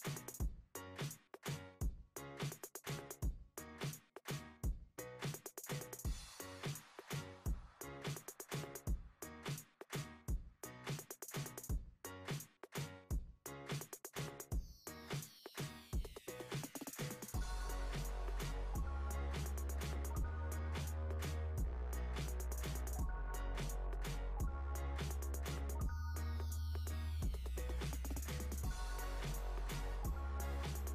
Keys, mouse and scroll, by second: 1.6 click, 2.6 click, 4.2 shift+d, 6.3 KP_7, 7.7-9.8 drag, 9.8 scroll down 3, 11.3-14.0 drag, 14.4 click, 15.0 click, 16.4-21.2 drag, 22.8 click, 24.1 click, 24.9-26.7 drag, 28.9 drag, 29.9-30.9 drag.